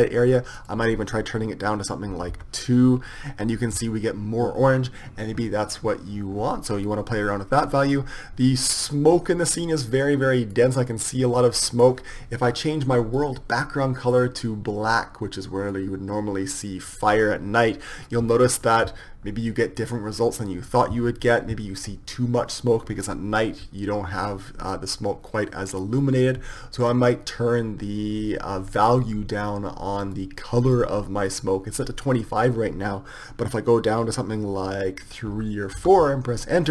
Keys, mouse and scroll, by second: 0.9-2.7 drag, 9.8-14.0 drag, 27.2-31.6 drag.